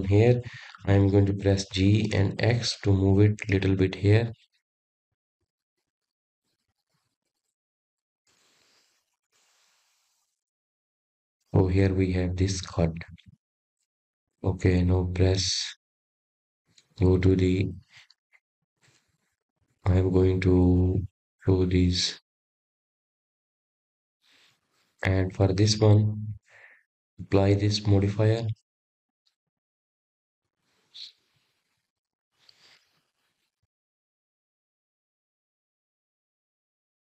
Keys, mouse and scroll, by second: 0.5-1.9 scroll up 3, 6.3 g, 13.8 click, 15.0 click, 15.6-16.1 scroll down 2, 16.1-18.2 middle drag, 18.2-21.3 scroll down 1, 21.7 click, 24.4 click, 25.3 click, 26.8 click, 28.5 click, 29.1 click, 30.6 click, 31.7-34.8 drag, 35.0 click, 36.8 click.